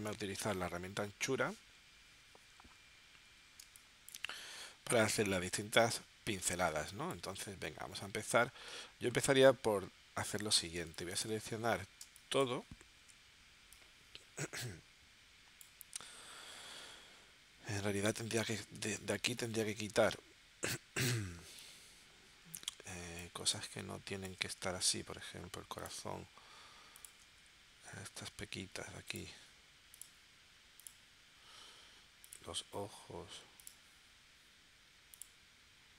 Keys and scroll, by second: 3.6 space, 6.7 space, 10.8 space, 12.0 space, 18.8 space, 21.3 space.